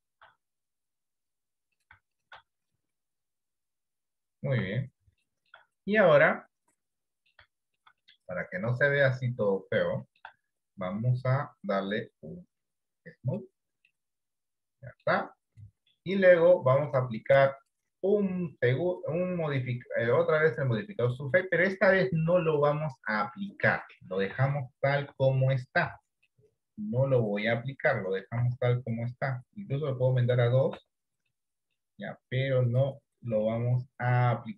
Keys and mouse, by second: 0.7 click, 2.7 click, 4.7 Tab, 5.3 shift+middle click, 5.9-7.6 middle drag, 7.7 shift+middle click, 8.2-10.3 middle drag, 10.7 shift+middle click, 11.3-13.5 drag, 14.0-15.1 middle drag, 17.1 click, 17.7-21.5 drag, 22.5 middle click, 23.5 middle click, 24.5 Tab, 25.2 Tab, 25.8 middle click, 26.0 Tab, 26.3-28.3 middle drag, 28.5 Tab, 30.9 Tab, 31.4 middle click, 32.8 click, 33.5-34.5 middle drag.